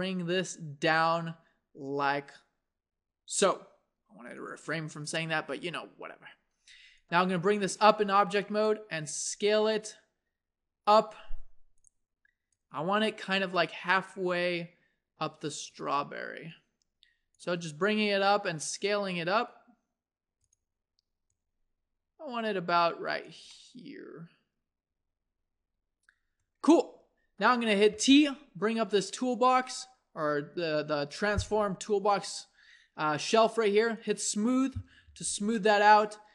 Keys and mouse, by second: 4.7 Tab, 8.2 click, 9.1 s, 12.5-14.3 drag, 13.9 s, 16.5 click, 17.7 s, 23.5-27.9 middle drag, 27.9-31.1 drag, 27.9 t, 33.9-36.3 drag, 35.1 t.